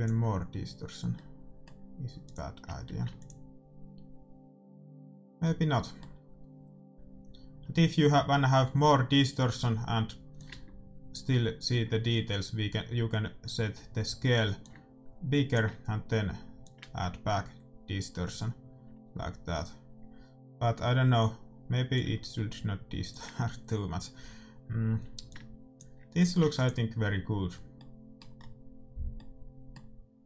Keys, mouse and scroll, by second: 1.3-3.3 middle drag, 2.6-4.4 drag, 2.9 ctrl+s, 5.7-7.7 middle drag, 10.3-12.5 drag, 14.8-18.9 drag, 22.2-24.2 drag, 25.4-28.1 drag, 26.7 ctrl+s, 27.7-30.2 middle drag.